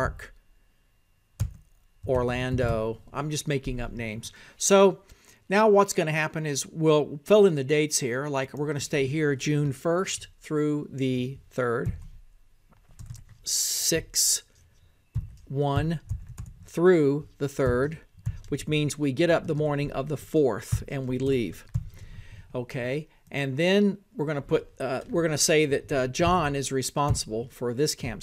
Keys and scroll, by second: 0.0-13.5 typing, 14.4 Down.